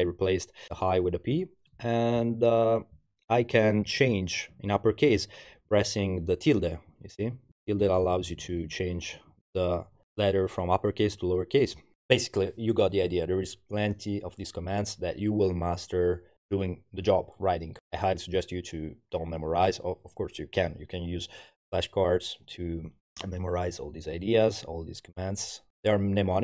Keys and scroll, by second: 0.1 Right, 0.7 Left, 1.3 Right, 2.3 alt+5, 4.0 alt+5, 6.5 alt+5, 6.9 alt+5, 7.2 alt+5, 7.8 Left, 8.1 Left, 8.2 Left, 8.6 Left, 8.7 Left, 9.2 alt+5, 11.1 alt+5, 11.3 alt+5, 11.6 alt+5.